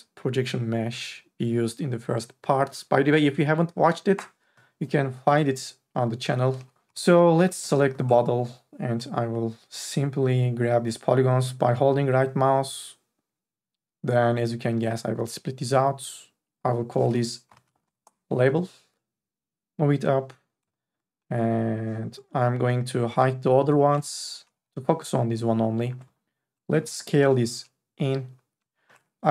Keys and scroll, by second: 4.4 Delete, 6.2 4, 6.6 e, 6.8 3, 7.4 q, 17.7 b, 18.0 Return, 24.5 3, 27.2 t.